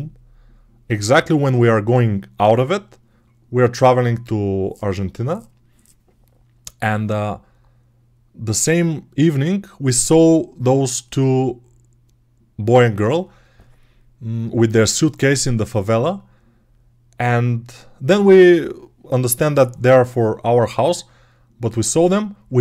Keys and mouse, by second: 20.3-22.6 right drag.